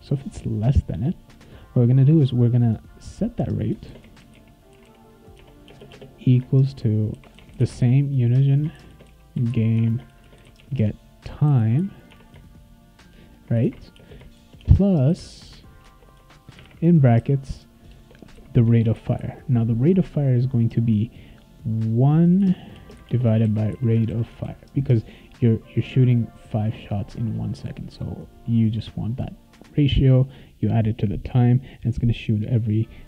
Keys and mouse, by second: 0.9 Return, 3.6-12.3 typing, 5.3 Tab, 13.3-18.3 typing, 18.8 ctrl+s, 22.4-24.6 typing.